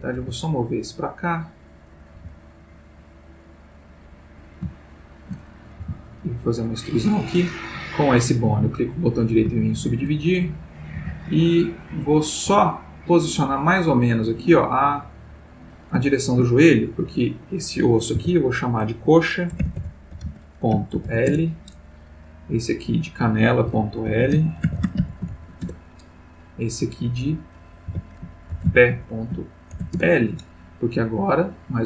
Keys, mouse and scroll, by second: 0.2 g, 1.2 click, 1.8 click, 2.1 g, 4.3 click, 4.8 shift+middle click, 5.8 shift+e, 6.7 click, 7.6 click, 8.3 right click, 9.0 click, 9.6 shift+middle click, 10.7 click, 10.9 g, 11.6 click, 12.3 click, 12.4 g, 13.1 click, 14.0 click, 14.3 g, 15.4 click, 16.0 shift+middle click, 17.0 click, 18.2 F2, 19.6-21.1 typing, 21.3 shift+Return, 22.6 click, 23.7 F2, 24.2-25.3 typing, 25.6 shift+Return, 26.9 click, 27.9 F2, 28.5 shift+p, 28.6 shift+e, 28.9 shift+., 29.7 shift+l, 29.9 shift+Return.